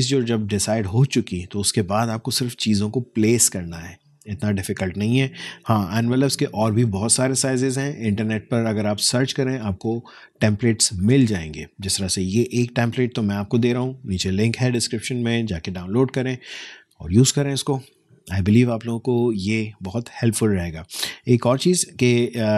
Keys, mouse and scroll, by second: 21.4-22.5 alt+scroll up 1.